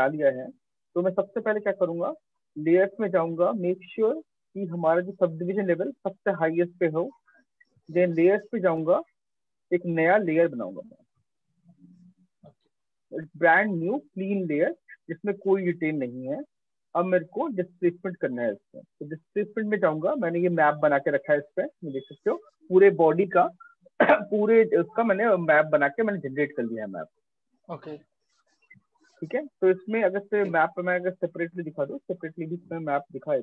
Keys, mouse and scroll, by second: 1.2 click, 3.9 click, 4.3 click, 4.9 click, 6.2 click, 8.2 click, 9.7 click, 13.9 alt+click, 16.6 click, 17.7 click, 18.7 click, 30.4 click, 31.2 click, 32.9 click.